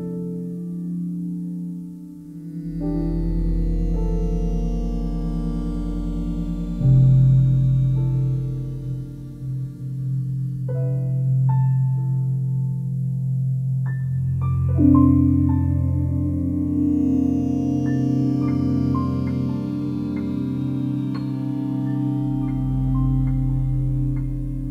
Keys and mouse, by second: 0.1-3.8 alt+drag, 5.9 click, 6.8 alt+click, 7.7 alt+click, 8.8 click, 10.4 shift+click, 11.9 click, 13.0 click, 14.7 m, 15.8 click, 16.9 ctrl+z, 18.5 ctrl+alt+click, 21.0 middle click, 21.0 click, 21.9 middle click, 22.8-24.7 drag.